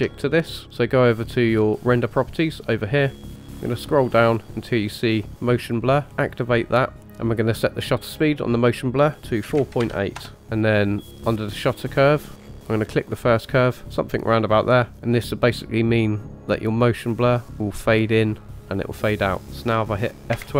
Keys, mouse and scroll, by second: 2.0 click, 3.0-5.4 scroll down 7, 5.4 scroll down 2, 5.7-6.9 drag, 7.0 ctrl+z, 8.1 click, 12.1 click, 12.4 scroll down 3, 12.9 click.